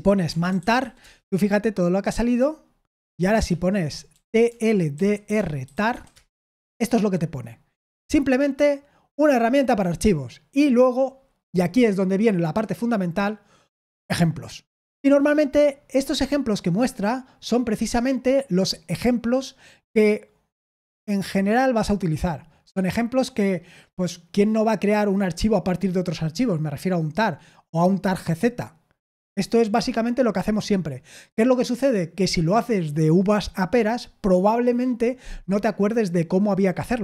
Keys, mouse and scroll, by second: 0.0-1.3 typing, 3.5-6.4 typing.